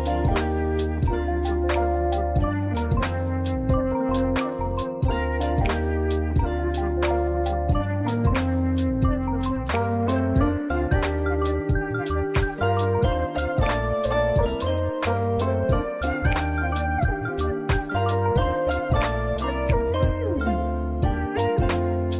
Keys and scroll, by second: 6.6 ctrl+z, 15.7 scroll down 1, 16.0 scroll up 1.